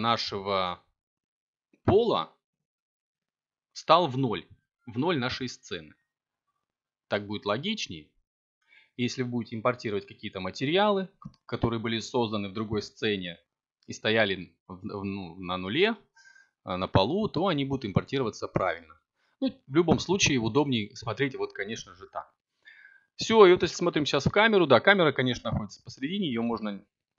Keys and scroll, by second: 5.0 a, 11.1 0, 16.1 2, 16.8 4, 17.4 Return, 19.1 7, 22.3 g, 26.4 r.